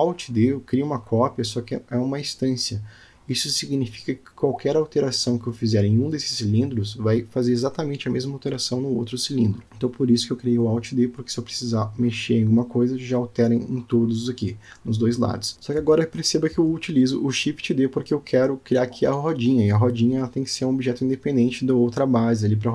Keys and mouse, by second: 4.7 click, 5.0 g, 7.6-8.9 middle drag, 9.2 middle click, 9.7 shift+middle click, 11.5-12.0 alt+middle drag, 13.5 shift+d, 16.8 s, 21.1 g.